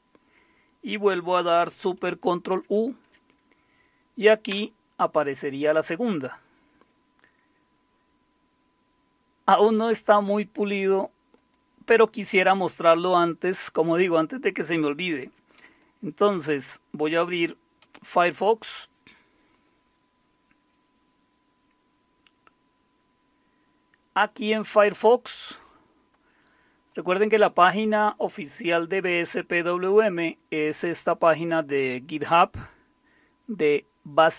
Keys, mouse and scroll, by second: 2.5 ctrl+super+u, 4.5 Return, 9.5 click, 10.6 click, 16.2 super+0, 17.8 alt+super+w, 26.9 click.